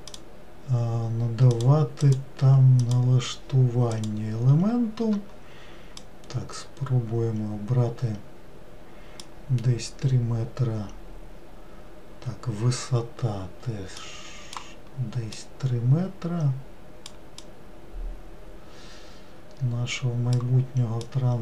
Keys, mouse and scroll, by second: 0.1-4.0 drag, 6.0-9.1 drag, 14.0-20.4 drag, 21.0-21.4 drag.